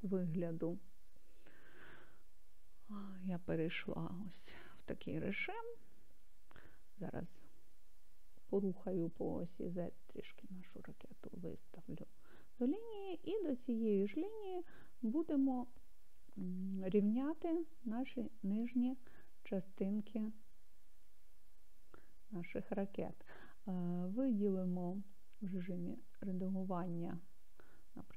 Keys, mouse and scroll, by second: 3.0-4.1 drag, 8.5 g, 9.5 z, 11.7 click, 14.9-18.3 scroll up 2, 19.0-23.1 middle drag, 23.9-25.2 drag, 26.1 click.